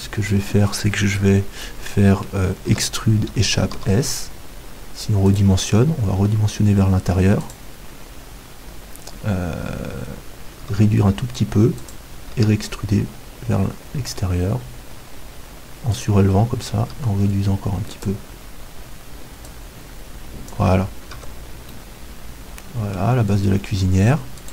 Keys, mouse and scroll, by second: 1.6-5.4 middle drag, 2.7 e, 3.8 s, 5.4-7.2 drag, 6.2 e, 7.5-9.4 drag, 10.6 s, 11.9-13.8 drag, 12.3 e, 16.0-21.2 drag, 16.8 s, 21.2 Tab, 21.7 middle click, 22.4-24.5 middle drag.